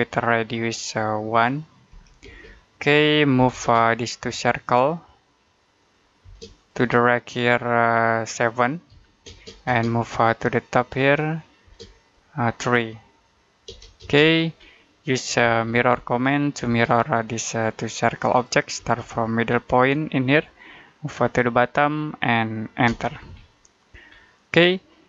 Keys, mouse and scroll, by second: 0.6 click, 1.8 1, 2.1 space, 3.2 m, 3.4 space, 3.7 click, 6.1 space, 6.4 click, 8.8 7, 9.1 space, 9.7 click, 11.5 space, 11.9 click, 13.5 3, 13.8 space, 14.6 middle click, 15.3 m, 16.5 space, 17.0 click, 18.6 space, 20.3 click, 22.7 space, 23.3 middle click, 23.9-24.5 scroll down 1, 24.5 middle click.